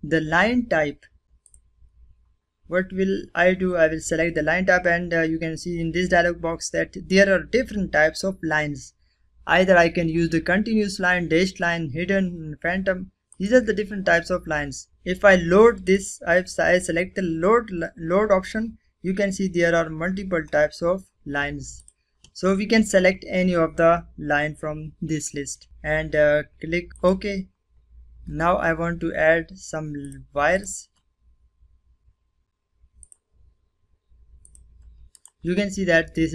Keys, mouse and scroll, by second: 0.2 click, 2.3 typing, 12.1 click, 17.6-18.2 scroll down 1, 18.6-19.0 scroll down 1, 19.8 scroll, 19.9 scroll up 1, 21.1 click, 25.2 click, 25.4 click, 26.0 click, 28.8 click, 31.8 click, 33.9 right click.